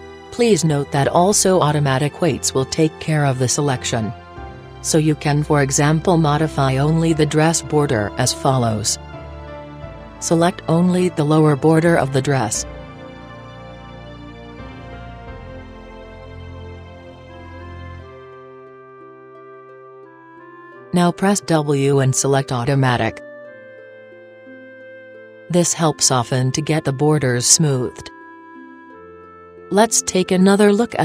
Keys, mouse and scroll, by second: 4.8-10.7 drag, 10.7-14.2 middle drag, 13.5 a, 14.4 b, 16.1 b, 17.4-20.5 middle drag, 19.1 b, 20.9 middle click, 21.0-24.3 middle drag, 24.4 w, 27.2-31.0 middle drag.